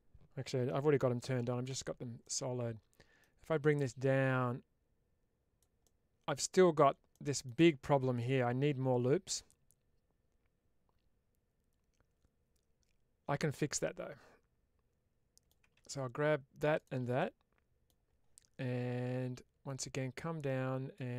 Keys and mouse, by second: 1.6 /, 2.1 middle click, 3.7-5.5 drag, 5.7 middle click, 7.0 middle click, 8.1-15.3 middle drag, 17.1 middle click, 20.5 click.